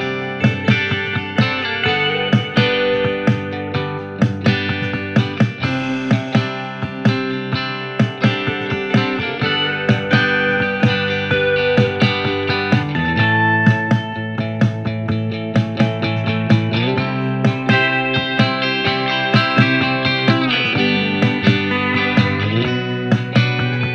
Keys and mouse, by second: 0.8 typing, 3.4 w, 4.4 r, 4.9 click, 8.0 ctrl+z, 9.2-23.9 ctrl+drag, 9.3 ctrl+z, 11.2 e, 13.2 w, 19.8 r, 20.8-22.7 typing.